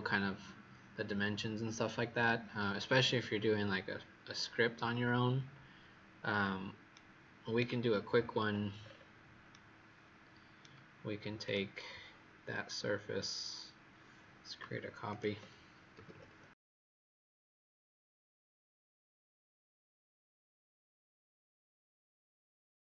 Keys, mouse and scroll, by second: 8.0-8.7 scroll down 10, 8.7-9.4 scroll down 5, 9.4 right click, 9.4-11.3 scroll down 3, 11.3 click, 15.9 KP_5, 16.0 KP_0, 17.9-18.5 scroll down 5, 18.5-19.8 scroll down 5, 19.8-20.1 scroll up 3.